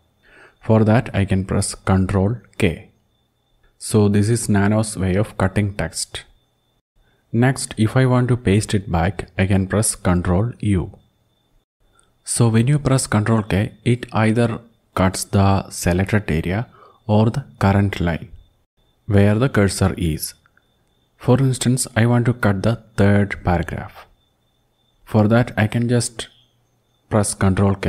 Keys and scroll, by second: 2.1 ctrl+k, 9.6 ctrl+u, 11.8 ctrl+Home, 21.6 Down, 21.7 Down, 22.0 Down, 22.2 Down, 22.6 Down, 26.3 ctrl+k.